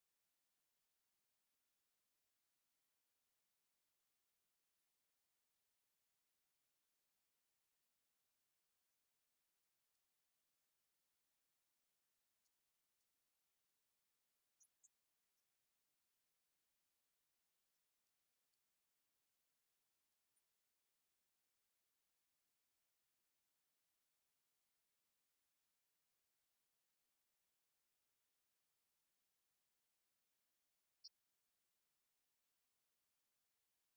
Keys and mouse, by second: 1.5-6.5 drag, 7.2 right click, 7.8-14.2 drag, 15.2 right click, 16.9 right click, 17.9-19.9 drag, 21.4 right click, 22.6 right click, 23.6 right click, 24.3 right click, 25.2-26.9 drag, 28.9-31.7 drag, 32.3 right click, 33.4-33.9 drag.